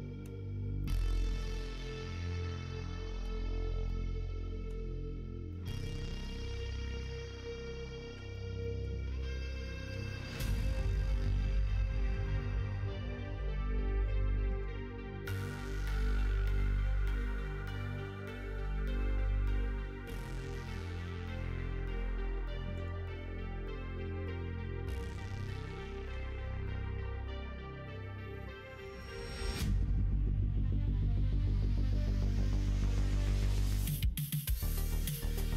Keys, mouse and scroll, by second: 0.8-3.2 middle drag, 3.8 middle click, 5.5 middle click, 7.0 click, 8.0 2, 8.2 click, 8.5 middle click, 9.8 g, 11.0 click, 11.2 g, 12.3 middle click, 13.4 g, 14.4 ctrl+z, 15.2 g, 16.7 ctrl+z, 17.0 middle click, 18.5 click, 18.9 middle click, 19.6 middle click, 20.6 middle click, 21.3 middle click, 22.0 middle click, 22.7 alt+click, 23.3-24.8 middle drag, 25.8 shift+middle click, 26.4 middle click, 27.9 click, 28.5 middle click, 30.1 ctrl+r, 32.3 ctrl+z, 32.7 middle click, 33.4 shift+middle click, 35.0 ctrl+r.